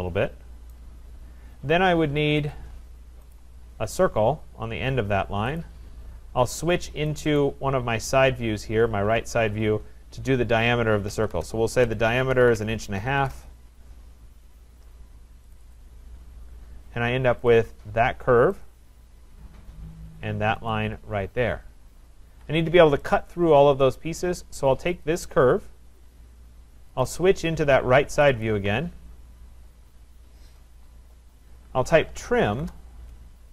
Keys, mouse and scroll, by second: 0.7 right click, 2.3 Escape, 2.4 Escape, 3.4 click, 5.6 click, 7.2 click, 7.4 click, 8.5-10.6 scroll, 10.6 scroll, 11.1 d, 11.3 Return, 12.1-13.6 typing, 15.6 click, 15.8 click, 16.5-17.5 scroll, 17.5 click, 17.5-18.2 scroll, 18.7 click, 19.2-20.6 scroll, 20.7 click, 21.9 scroll, 22.3 Escape, 24.0 right click, 25.1 click, 27.0 click, 27.2 click, 28.2 click, 28.4 click, 29.1-31.5 scroll, 31.5 scroll, 31.9-32.8 typing.